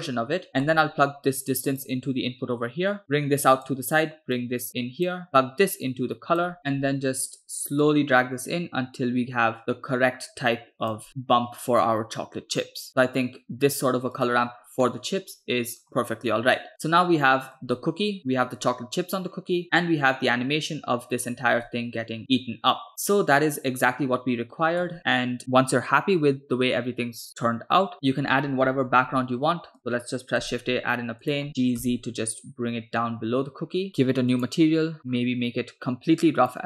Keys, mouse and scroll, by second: 0.5 scroll down 2, 0.6 scroll up 1, 0.6-1.0 middle drag, 1.8-3.0 drag, 3.2-3.9 drag, 4.5-5.3 drag, 5.6-6.6 drag, 7.9-11.1 drag, 12.7-13.2 drag, 14.1 click, 15.1-16.4 middle drag, 16.4 scroll down 1, 16.7-17.8 middle drag, 19.4 scroll down 2, 19.6-21.8 scroll up 1, 21.8 space, 25.0 space, 27.9 click, 29.0 shift+a, 30.4 s, 31.8 g, 34.4 click, 35.0 middle click, 35.0 scroll down 3, 35.1-35.6 scroll up 1, 35.6 scroll up 2, 36.5-36.6 drag.